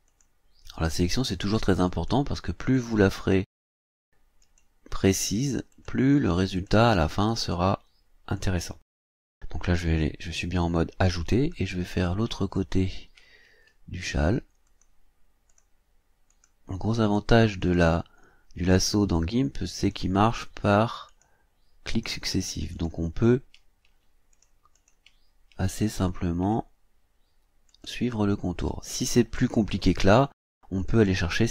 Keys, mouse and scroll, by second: 0.1 click, 1.0 click, 1.9 click, 2.7 click, 3.6 click, 4.4 click, 5.7 click, 6.5 click, 6.9 click, 7.4 click, 8.3 click, 13.3 ctrl+scroll up 2, 14.7 click, 15.5 click, 16.3 click, 17.0 click, 17.6 click, 18.1 scroll down 2, 18.7 scroll down 2, 19.8 click, 21.1 click, 22.3 click, 23.1-24.0 scroll down 4, 24.3 ctrl+click, 24.7 ctrl+click, 25.3-25.6 ctrl+scroll up 2, 26.0 ctrl+scroll down 2, 27.7 click, 28.6 click, 30.0 click, 30.9 click.